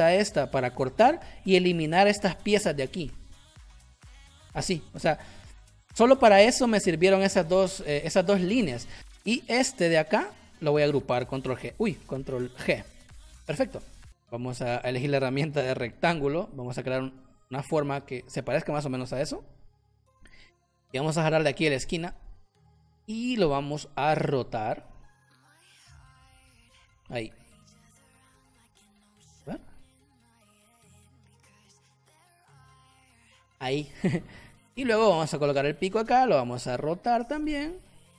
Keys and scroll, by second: 0.7 shift+m, 5.0 v, 6.3 Delete, 9.4 b, 9.6 v, 11.4 ctrl+h, 12.3 ctrl+h, 12.5 ctrl+g, 14.0 space, 16.4 m, 19.8 shift+x, 22.3 c, 23.4 v, 32.8 space.